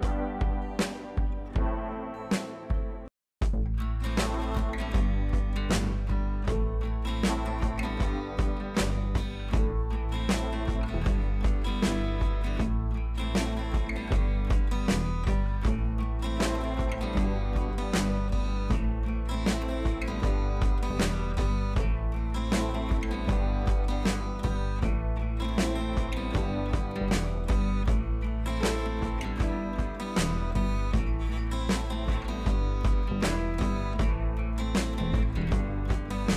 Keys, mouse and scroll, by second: 1.9-2.5 shift+drag, 7.9 click, 10.8 ctrl+z, 11.6 click, 12.2-12.7 scroll down 1, 14.3-16.2 drag, 16.3 Down, 17.7 click, 18.1 Up, 18.5-19.5 click, 19.5 Down, 21.9 Left, 22.6 click, 24.6-25.0 shift+click, 25.4 right click, 26.0 click, 34.7 t, 35.8 Caps_Lock, 36.2 t.